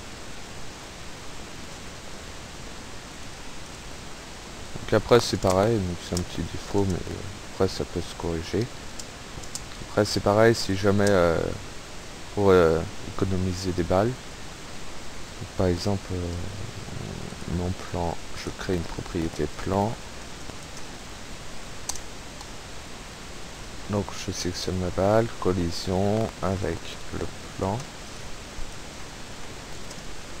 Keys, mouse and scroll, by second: 3.2 click, 3.7 click, 5.0 p, 5.5 space, 6.9 space, 7.4 Up, 8.9 space, 10.4 Right, 10.7 Left, 11.1 space, 11.5 Right, 11.9 Escape, 17.3 right click, 18.5 click, 19.4 click, 19.5-21.2 typing, 23.6 click, 24.5 right click, 26.6 click, 28.2 click, 28.7 click, 29.0-30.4 typing.